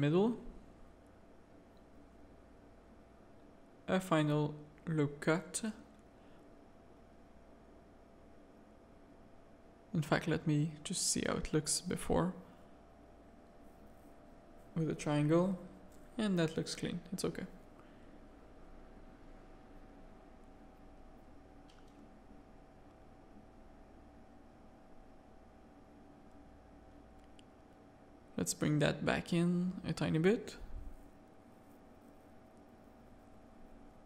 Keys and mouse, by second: 0.7 shift+middle click, 3.4 ctrl+r, 8.6 click, 9.3 shift+click, 9.4 shift+middle click, 10.1 f, 10.6 a, 11.2 Tab, 11.7 Tab, 11.7 a, 12.3 click, 13.1 shift+click, 13.9 f, 14.2 Tab, 14.6 z, 15.0 alt+a, 15.4 z, 16.9 middle click, 17.7 middle click, 19.2-21.4 middle drag, 21.7 middle click, 22.1 z, 22.3 shift+middle click, 22.8 middle click, 23.3 Tab, 23.6 z, 23.8 a, 24.5 middle click, 24.9 z, 25.2 shift+middle click, 27.1 e, 28.7 middle click, 30.0 shift+middle click, 30.9 alt+click, 32.0 click, 33.0 middle click, 33.8 Tab.